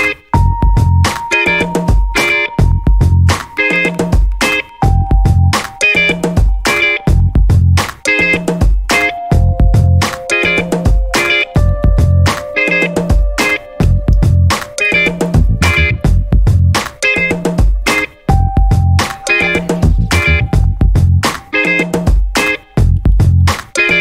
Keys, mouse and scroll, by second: 1.0 1, 1.4 2, 2.4 click, 2.8 scroll down 1, 3.3 scroll up 1, 4.4 click, 4.8 click, 5.9 click, 8.1 5, 8.8 0, 9.7 click, 10.9 4, 11.4 5, 12.1 click, 13.5-14.9 drag, 15.6-16.9 drag, 17.4 click, 17.8 click, 18.7 0, 20.5 click, 22.2 click, 23.5 click.